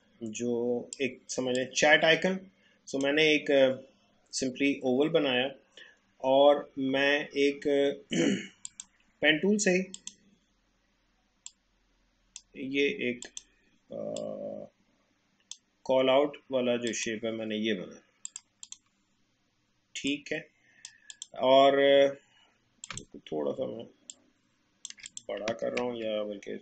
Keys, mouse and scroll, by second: 8.7-21.1 drag, 24.1 alt+shift+click, 25.7 a.